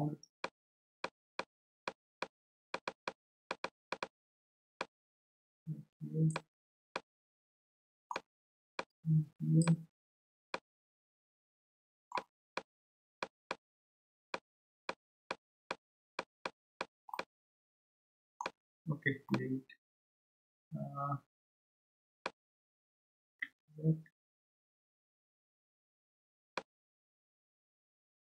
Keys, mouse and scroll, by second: 0.4-6.9 drag, 6.9-8.7 middle drag, 8.7-10.5 drag, 10.5-12.6 middle drag, 12.6-17.2 drag, 17.2-18.9 middle drag, 18.9-19.3 scroll down 2, 19.3-22.4 middle drag, 24.9-26.5 scroll up 7, 26.5-28.3 middle drag.